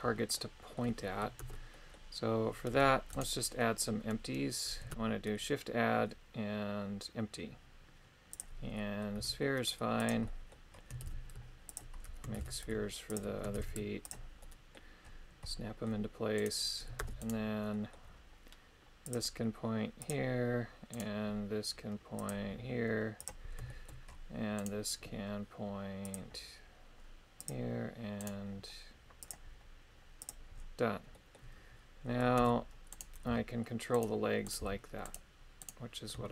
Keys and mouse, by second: 0.3 middle click, 1.4 ctrl+Tab, 1.7 middle click, 2.7 Tab, 3.1 right click, 4.9 shift+a, 8.7 middle click, 9.2 s, 10.0 click, 10.3 middle click, 11.0 shift+d, 11.7 ctrl+click, 12.4 shift+d, 13.1 ctrl+click, 13.6 shift+d, 14.0 ctrl+click, 14.4 middle click, 15.4 middle click, 16.4 right click, 17.0 ctrl+Tab, 17.2 right click, 17.7 middle click, 19.1 click, 20.9 right click, 22.3 click, 23.7 shift+middle click, 24.6 right click, 28.2 right click, 29.2 click, 31.1 middle click, 32.4 ctrl+Tab, 32.9 right click, 33.3 g, 34.0 right click, 34.5 right click, 34.6 g, 35.6 right click.